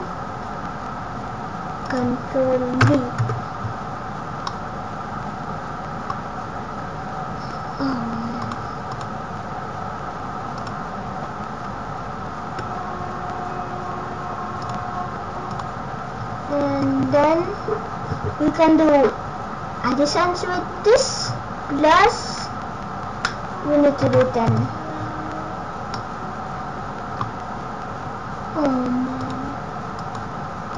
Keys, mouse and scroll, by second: 1.8 click, 4.4 middle click, 6.3-7.1 scroll down 1, 8.3 click, 12.6 ctrl+z, 14.5 click, 16.9 BackSpace, 25.8 middle click, 27.2-28.1 scroll down 1, 29.1 click.